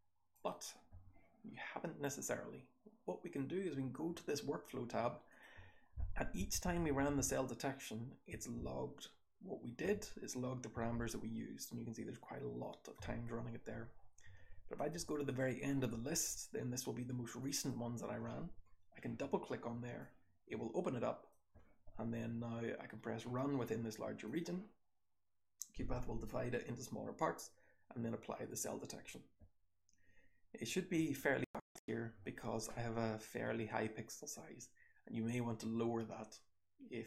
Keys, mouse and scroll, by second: 3.0 click, 5.2 click, 6.3 Down, 6.5 Down, 6.8 Down, 7.0 Down, 7.1 Down, 8.5 Down, 9.9 Up, 10.8 Down, 13.8-17.3 scroll down 1, 14.7 click, 15.2 click, 17.3 click, 17.3-17.6 scroll down 1, 17.4 click.